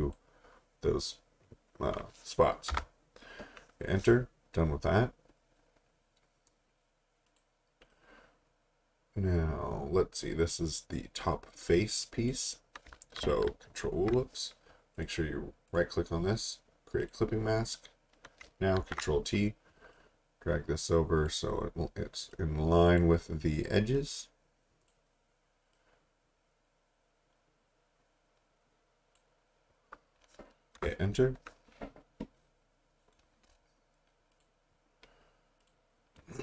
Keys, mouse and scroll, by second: 2.7 Return, 7.3 click, 13.2 ctrl+t, 15.0 right click, 17.0 click, 18.8 ctrl+t, 19.9 click, 30.8 Return, 34.3 click.